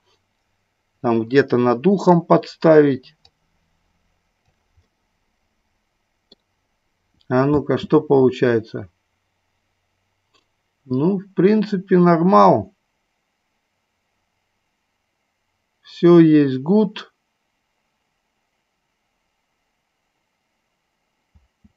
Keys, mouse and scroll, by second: 3.2-4.6 drag, 5.0-6.5 middle drag, 7.8 space, 21.6 space.